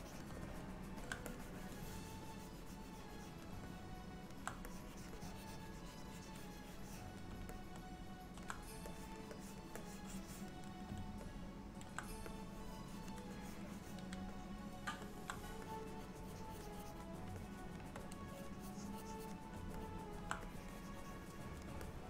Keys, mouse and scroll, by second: 0.5 middle click, 1.4 click, 3.8 middle click, 4.8 click, 5.2 click, 5.9 click, 6.4 click, 7.6 middle click, 9.0 click, 9.4 click, 9.9 click, 11.3 middle click, 12.4 click, 13.5 click, 13.8 click, 14.4 middle click, 15.7 click, 16.1 click, 16.3 click, 17.4 shift+click, 17.9 shift+click, 18.4 click, 18.7 click, 19.9 middle click, 20.5 click, 21.9 middle click.